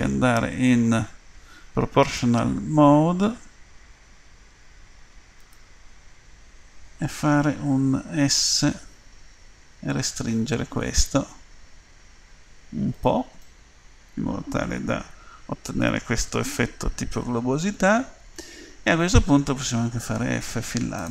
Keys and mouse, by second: 2.0-8.2 drag, 8.2 s, 13.5-15.9 middle drag, 16.1 middle click, 17.7 middle click, 20.2 f.